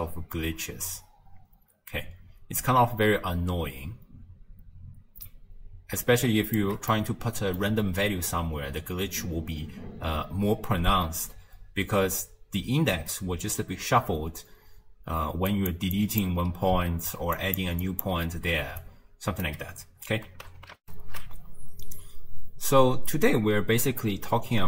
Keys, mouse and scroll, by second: 7.0-8.0 middle drag, 8.0 scroll down 3, 14.8-19.5 typing, 15.5 click, 16.0 click, 17.4 click, 17.8 click, 18.8 right click, 20.9 ctrl+alt+shift+q.